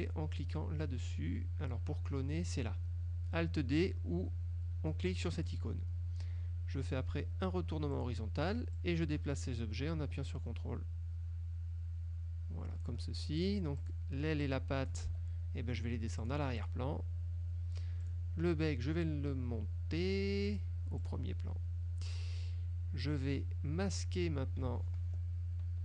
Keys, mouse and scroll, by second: 5.5 click, 8.0 click, 8.8-13.1 drag, 13.5 ctrl+click, 13.9 ctrl+click, 14.6 click, 15.2 ctrl+z, 16.3 click, 16.7 click, 18.1 click, 20.6 click, 21.1 click.